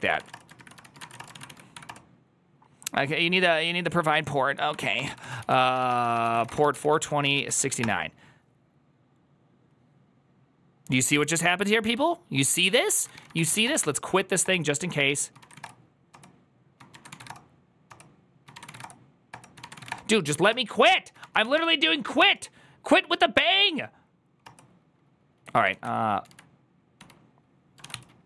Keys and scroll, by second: 0.0-1.3 typing, 0.7 ctrl+c, 1.0 Return, 1.2 ctrl+a, 1.6 Up, 1.7 Return, 4.3-7.1 typing.